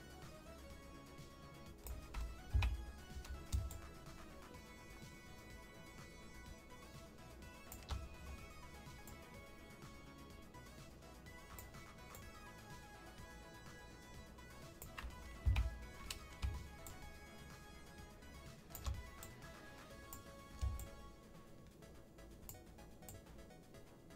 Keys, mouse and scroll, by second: 3.6 shift+Left, 3.6-7.7 shift+drag, 9.0-11.6 drag, 12.1-14.8 drag, 15.4 Left, 16.8-18.7 shift+drag, 19.1 click, 20.7-22.5 shift+drag, 23.0-24.1 shift+drag.